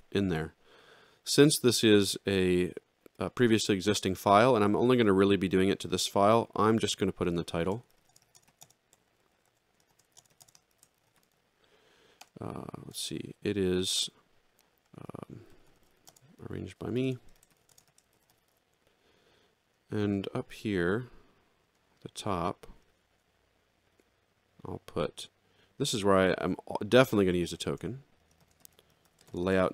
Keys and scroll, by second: 7.6-10.9 typing, 12.2 Return, 14.8 Return, 15.1 a, 16.1-18.0 typing, 22.8 Return, 22.9 Up, 23.1 Return, 23.1 Up, 23.9 Return, 27.4 shift+[, 28.6 a, 29.3 shift+n, 29.4 a.